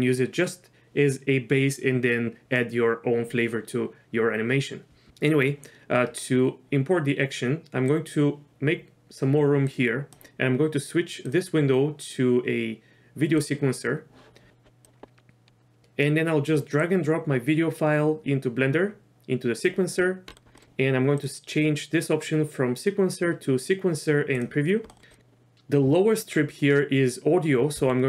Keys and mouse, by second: 8.0-9.3 drag, 9.9 click, 11.4-13.5 drag, 20.3 middle click, 20.6 middle click, 21.3-24.5 drag, 27.9 Delete.